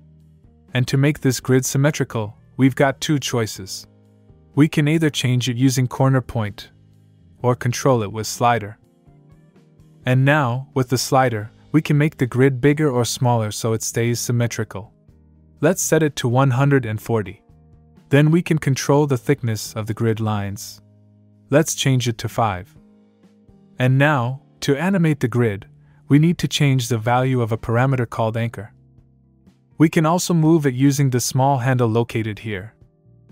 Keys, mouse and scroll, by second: 3.5 click, 7.7 click, 9.4 click, 11.7 click, 19.5 click, 26.7 click, 31.4 click.